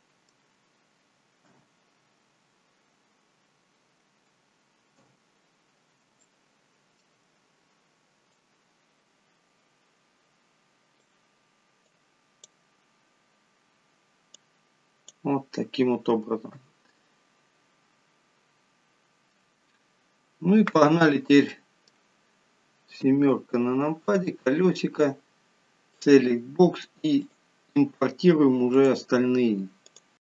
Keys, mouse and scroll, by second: 0.0 middle click, 1.7 KP_1, 2.8-4.7 scroll up 8, 5.3 KP_7, 6.5 shift+middle click, 8.6 click, 12.2 click, 14.6 click, 16.8 KP_1, 21.8 middle click, 23.3 KP_7, 24.3-24.8 scroll down 7, 26.2 click, 27.5 click.